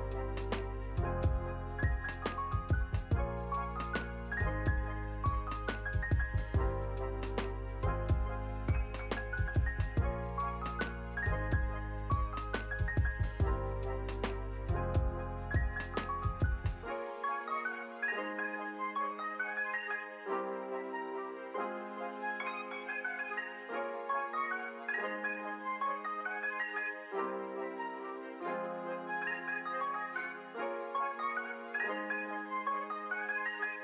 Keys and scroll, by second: 2.6 space, 5.9 space, 6.2 ctrl+s, 9.0 ctrl+d, 11.4 r, 24.7 u, 29.9 u.